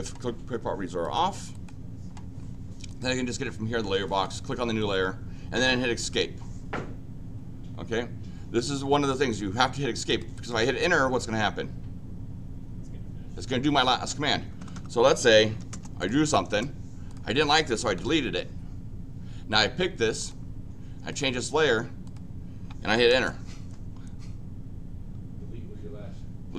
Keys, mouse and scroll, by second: 1.0 click, 1.5 click, 2.8 click, 4.0 click, 6.0 Escape, 10.0 click, 10.3 click, 14.7 Escape, 15.5 l, 15.7 Return, 16.0 click, 16.2 click, 16.5 Return, 17.0 click, 17.2 click, 20.1 click, 21.1 click, 22.0 click.